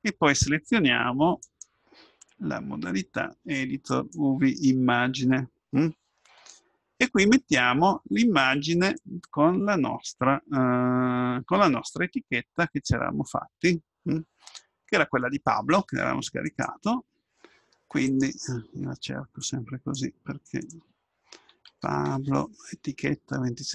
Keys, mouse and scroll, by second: 1.4-3.5 drag, 4.6-6.2 drag, 7.9-14.2 drag.